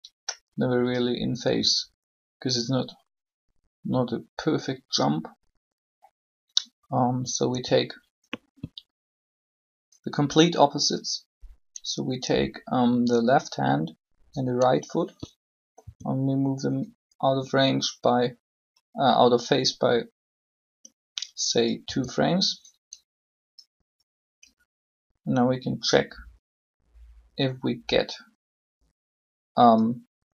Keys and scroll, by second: 7.5 b, 15.8 g, 21.8 g.